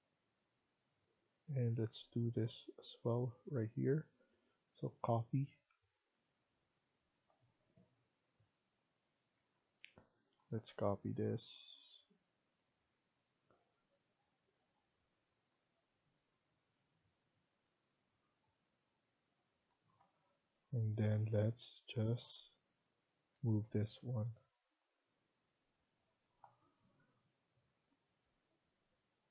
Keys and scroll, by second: 9.3 Escape, 9.6 Escape, 10.7 Tab, 19.6 Escape, 19.9 Escape, 20.1 Escape, 23.3 Escape, 23.6 Escape, 27.1-29.3 Right.